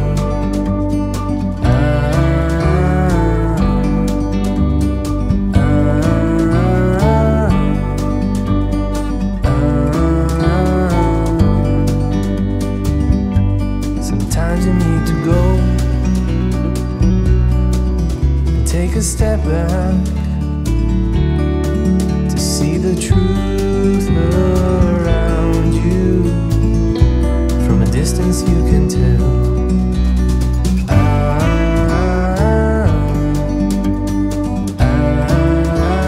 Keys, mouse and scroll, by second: 0.9-1.6 scroll down 7, 1.6 ctrl+z, 1.7 ctrl+z, 1.9 ctrl+z, 2.1 ctrl+z, 2.4 ctrl+z, 2.6 ctrl+z, 2.9 ctrl+z, 3.1 ctrl+z, 3.3 ctrl+z, 3.7-4.2 scroll down 4, 4.2 ctrl+z, 4.5 middle click, 5.0-5.3 scroll down 1, 5.3 Tab, 5.7 click, 6.2 g, 6.9 middle click, 7.2 scroll up 3, 7.4 shift+middle click, 7.9 Tab, 8.4-9.2 scroll up 2, 9.6 e, 14.3 e, 17.8-18.1 scroll down 2, 18.1-19.0 scroll up 1, 19.0 e, 19.9-20.5 scroll down 2, 20.5 Tab, 21.0-21.5 scroll up 3, 21.5 click, 21.7 scroll down 5, 22.4-23.0 shift+middle drag, 23.0 click, 23.3-25.3 middle drag, 26.0 click, 26.2 scroll up 1, 26.5-27.1 middle drag, 27.1 scroll down 3, 27.3-28.8 middle drag, 28.8 KP_1, 30.3-30.7 scroll up 1, 30.7-31.3 middle drag, 31.3 scroll down 1, 31.5 middle click, 32.0 click, 32.3 scroll up 1, 32.5-33.6 middle drag, 33.6 g, 35.1 middle click, 35.5 g.